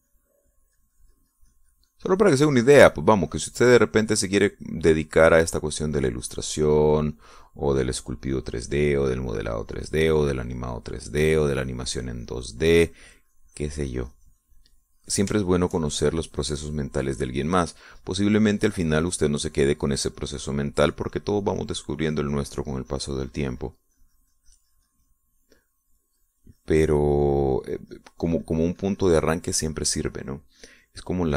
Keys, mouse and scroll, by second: 10.1-16.8 drag, 17.0 shift+middle click, 17.7-22.9 shift+drag, 27.6-31.3 drag.